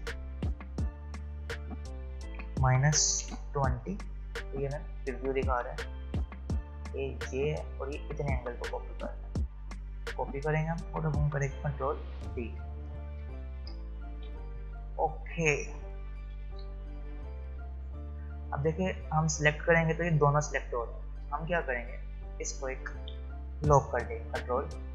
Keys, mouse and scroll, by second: 4.8 click, 9.9 click, 11.6 ctrl+d, 16.4 v, 16.6 space, 17.2 click, 17.5 space, 18.4 click, 20.2 space, 20.5 click, 20.7 space, 21.9 click.